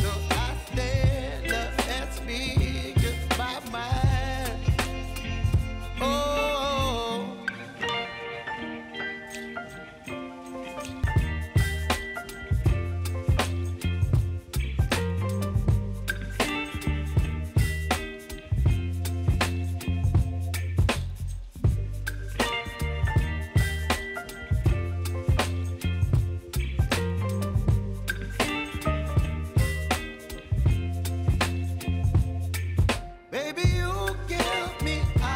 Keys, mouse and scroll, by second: 0.0 u, 0.8 click, 1.3 space, 3.5 space, 9.8 space, 11.1-13.9 drag, 14.9 click, 15.7 right click, 16.8 click, 19.2 ctrl+d, 20.3-22.2 drag, 26.9 click, 28.6 right click, 29.6 click, 32.7-35.0 shift+drag.